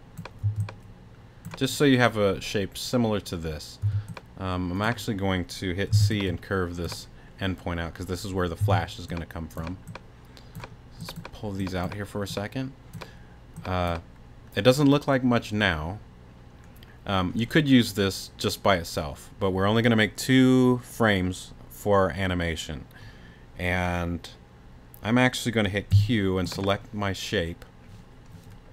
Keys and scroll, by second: 0.4 t, 3.8 t, 5.9 c, 8.6 t, 25.9 q.